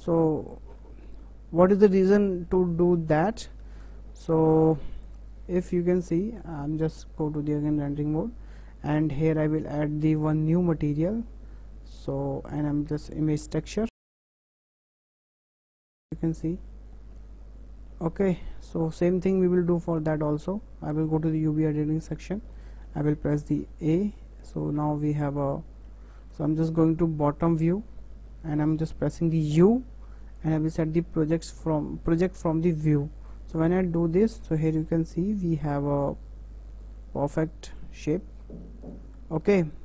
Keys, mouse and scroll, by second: 1.3 scroll down 3, 1.5-1.9 middle drag, 1.9-2.2 scroll up 3, 2.2-3.8 shift+middle drag, 3.8 click, 4.2-4.6 scroll down 3, 4.6-5.1 middle drag, 5.1 click, 7.0 click, 7.8-11.1 shift+middle drag, 11.1-12.6 drag, 13.8-16.9 drag, 17.0 scroll down 2, 17.1-18.0 middle drag, 18.0 scroll up 2, 18.4-21.0 shift+middle drag, 21.0 click, 22.1-23.6 middle drag, 23.6 a, 24.1-25.6 shift+middle drag, 25.6-27.6 scroll up 1, 27.6 `, 28.3-32.9 shift+middle drag, 34.9 a, 36.1 click, 37.8 click, 39.7 click.